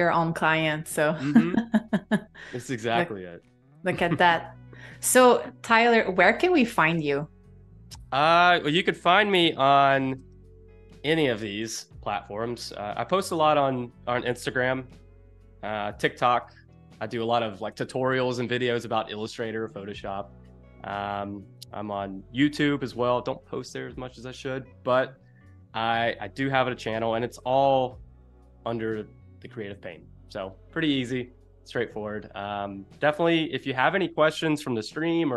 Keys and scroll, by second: 0.7 space, 3.1 space, 10.2 space, 15.9 super+-, 16.1 space.